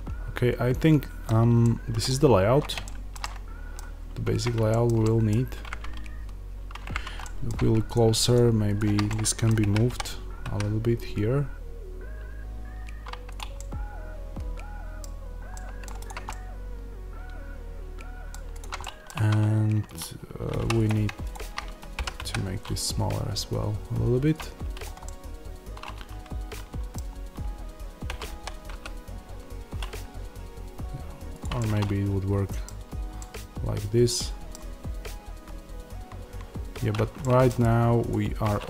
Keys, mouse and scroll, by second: 3.9-4.6 scroll up 1, 7.8 click, 9.0-13.2 middle drag, 9.5 g, 13.2 click, 13.4-15.9 middle drag, 15.0-15.4 scroll down 1, 15.9 click, 16.2-18.4 middle drag, 18.4 click, 18.7-19.8 middle drag, 19.0 Tab, 19.8 click, 20.5 3, 20.6 click, 21.8 g, 24.3 click, 24.9-31.3 middle drag, 28.0 g, 31.3 click, 31.4-38.0 middle drag, 32.5-33.0 scroll down 2, 38.0 click.